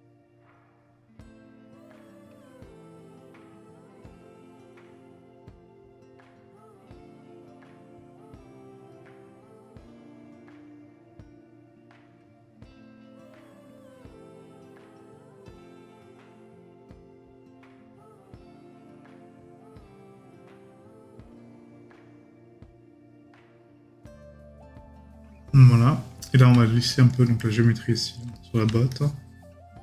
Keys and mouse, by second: 26.2 right click, 28.3 right click.